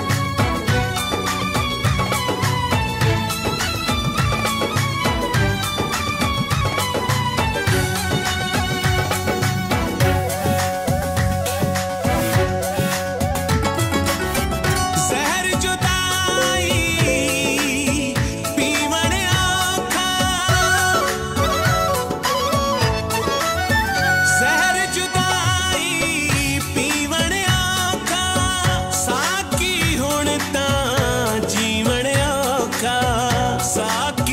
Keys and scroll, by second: 6.3 ctrl+s, 7.5 Left, 7.9 Up, 8.2 Left, 14.1 F4, 14.8 ctrl+s, 16.0 Return, 17.3 Left, 17.6 Return.